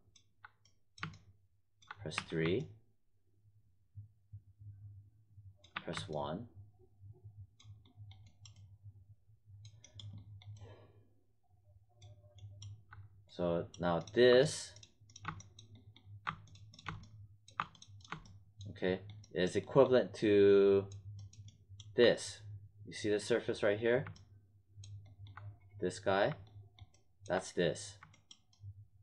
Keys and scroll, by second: 2.1 3, 5.7 1.